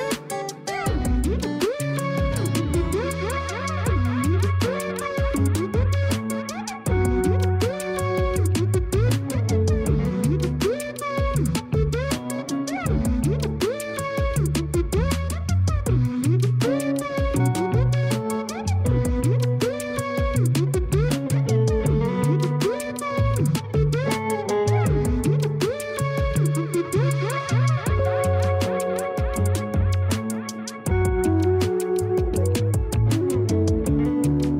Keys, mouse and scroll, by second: 0.6 scroll up 1, 0.9-2.1 middle drag, 2.1-2.7 scroll up 1, 2.7-4.7 middle drag, 4.7-5.6 scroll up 2, 5.6 scroll down 2, 6.5 shift+click, 8.1 ctrl+KP_Subtract, 8.6 a, 8.8 a, 9.9 click, 10.4-13.0 right drag, 13.0 click, 13.9-14.9 drag, 15.4 a, 15.6 a, 16.0-17.6 middle drag, 17.6 scroll down 3, 18.4 KP_1, 18.9-19.8 scroll up 7, 20.1 click, 22.1 g, 23.8-24.6 scroll up 4, 24.6 g, 26.0-27.1 scroll down 10, 27.1 scroll up 1, 27.8 KP_7, 28.6 r, 30.0-31.4 middle drag, 31.4 scroll down 4, 32.1 KP_4, 33.0 KP_1.